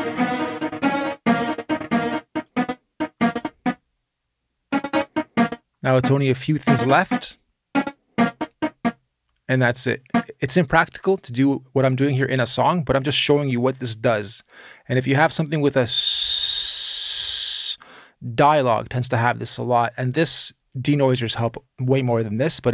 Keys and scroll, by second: 10.3 space.